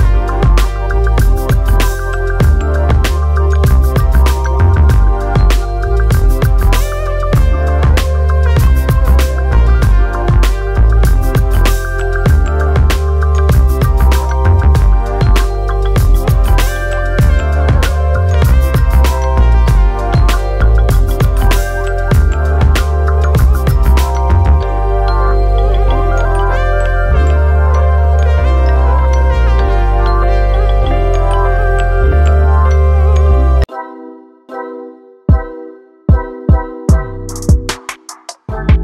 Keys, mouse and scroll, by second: 0.2 click, 0.8 click, 1.8 click, 3.1 click, 3.7 click, 5.0 click, 7.3 click, 7.9 click, 8.5 alt+a, 8.7 scroll down 1, 8.8 shift+middle click, 9.0-9.6 scroll up 1, 9.6 click, 10.0 alt+d, 10.7 middle click, 11.0 click, 11.3 shift+middle click, 11.8 click, 13.0 r, 13.8 click, 14.3 click, 14.9 click, 15.5 click, 16.0 click, 16.5 click, 17.0 s, 17.5 click, 17.8 alt+a, 18.0 click, 18.2 click, 19.6 click, 20.4 s, 21.5 click, 22.0 alt+a, 23.4 click, 24.0 alt+d, 24.8 r, 26.3 click, 26.7 click, 27.3 click, 27.4 click, 28.3 click, 28.5 click, 29.4 click, 30.2 s, 30.9 s, 31.5 alt+a, 31.6-32.2 scroll down 5, 31.9 shift+middle click, 32.2-32.6 scroll up 4, 32.6 click, 34.6 click, 34.9 scroll down 1, 35.0 middle click, 35.8 r, 37.6 r, 38.5 alt+a, 38.6 scroll up 1.